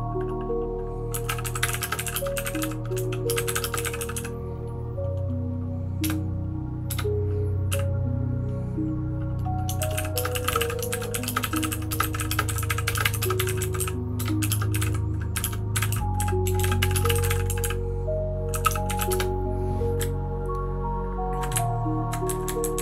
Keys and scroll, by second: 0.8-4.6 typing, 6.0 typing, 7.7 typing, 9.5-21.4 typing, 21.5 Up, 22.0 Up, 22.2 Down, 22.6 Down, 22.7 Down.